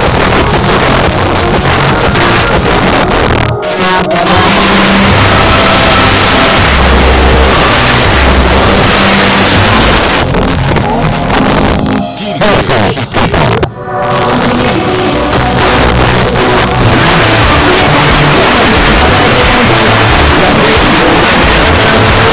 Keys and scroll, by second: 10.0 Page_Down.